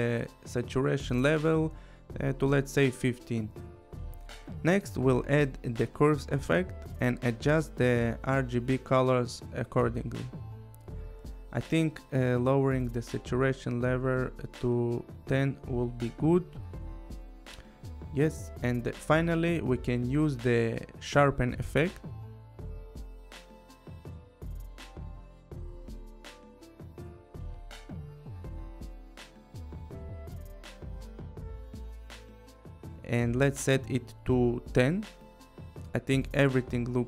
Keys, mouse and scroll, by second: 2.1 End, 2.3 5, 2.9 Return, 4.9 click, 5.3-6.2 typing, 7.0 click, 9.1 click, 10.4 click, 13.0 click, 14.2 click, 16.3-17.1 typing, 16.4 click, 18.8 click, 19.4 click, 21.0 click, 22.3 click, 22.7-24.1 typing, 24.4 click, 26.2 click, 26.3 scroll, 26.8 click, 28.2 click, 30.6 5, 31.0 Return, 33.5-34.3 typing, 33.6 click, 34.3 click, 34.8 click, 35.3 click, 36.9 click.